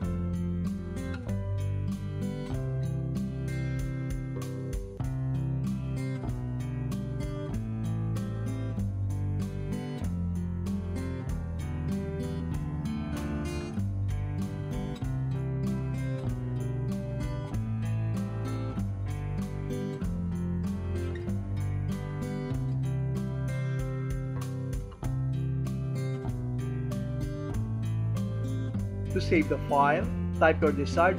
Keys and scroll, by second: 2.1 Up, 3.7 Up, 5.5 Right, 7.5 |, 9.5 Right, 11.5 n, 13.5 Tab, 15.5 Tab, 16.5 ctrl+a, 18.4 shift+f, 20.4 Down, 22.1 Return, 22.6 Return, 24.1 alt+f, 27.1 a.